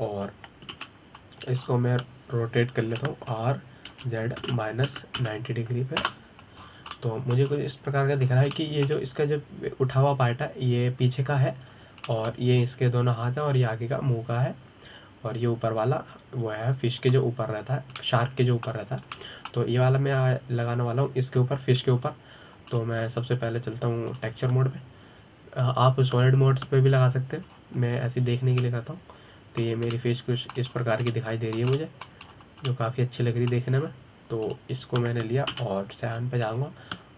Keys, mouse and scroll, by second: 0.3-1.6 middle drag, 1.6-1.9 scroll up 3, 2.4 KP_7, 3.3-4.5 scroll down 7, 4.5 r, 8.3-8.6 scroll up 7, 8.6-9.2 middle drag, 9.2-9.9 scroll down 5, 9.9 scroll up 2, 10.2-13.2 shift+middle drag, 13.7-16.7 middle drag, 19.6-23.8 middle drag, 24.4 click, 28.5 click, 29.9-30.3 scroll up 4, 30.3-32.4 middle drag, 32.4-32.8 scroll up 3, 32.8-34.0 middle drag, 34.0-34.4 scroll down 2, 34.4-35.5 middle drag, 35.5-36.1 scroll down 3, 36.1 click.